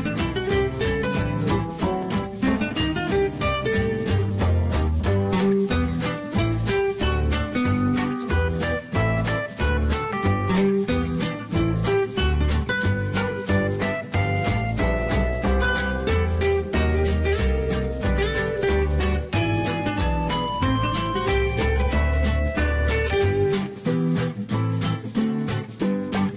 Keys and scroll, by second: 20.4 Escape.